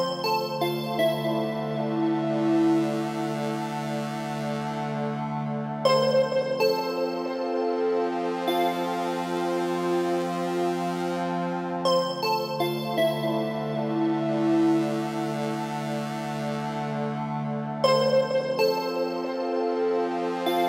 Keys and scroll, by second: 2.2 Down, 3.7 Left, 7.8 ctrl+g, 12.6 Return.